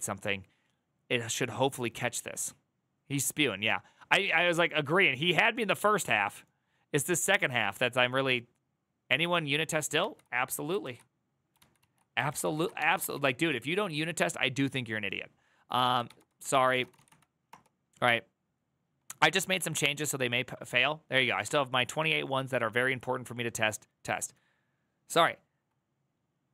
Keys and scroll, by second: 9.7 alt+[, 10.6 ctrl+a, 11.3 alt+[, 11.6 alt+{, 12.0 ctrl+c, 12.3 ctrl+c, 12.3 ctrl+a, 12.9 ctrl+c, 13.0 ctrl+c, 15.3-17.2 typing, 17.2 Return.